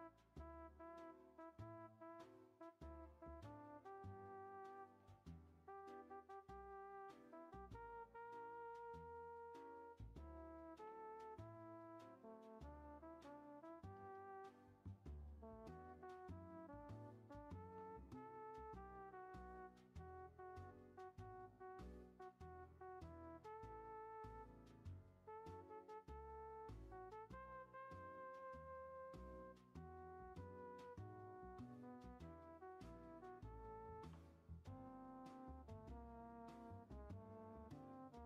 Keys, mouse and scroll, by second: 0.7 click, 0.9 shift+scroll up 1, 1.0 shift+middle click, 1.9 click, 2.7 e, 4.1-4.7 middle drag, 4.7 ctrl+z, 5.1 click, 5.5 ctrl+z, 6.0 ctrl+z, 7.3 e, 9.1 middle click, 9.7 scroll down 3, 10.1 ctrl+a, 12.4 ctrl+z, 12.7 ctrl+z, 12.9 ctrl+z, 13.1 ctrl+z, 13.4 ctrl+z, 13.5 ctrl+z, 13.7 ctrl+z, 13.9 ctrl+z, 14.6 shift+middle click, 14.8 scroll up 2, 15.2 middle click, 15.5 g, 17.1 scroll down 2, 17.5 ctrl+a, 19.6 click, 20.3 ctrl+a, 28.1 g, 29.6 e, 31.9 shift+scroll up 1, 32.0 shift+middle click, 32.6-33.2 scroll up 1, 33.2 click, 33.5 scroll up 3, 33.9 ctrl+a, 36.5 middle click, 37.2 scroll down 3, 37.5 scroll up 1, 37.5 middle click, 38.1 scroll down 2.